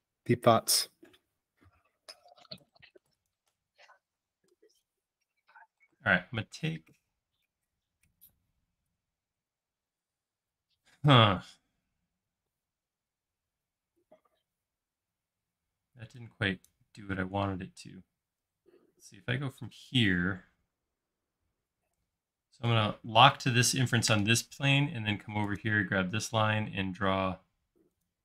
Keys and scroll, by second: 3.8 e, 4.5 space, 5.9 s, 7.6 space, 10.9 m, 14.0 space, 15.3 e, 18.5 c, 20.1 Left, 21.4 Left, 22.7 Down.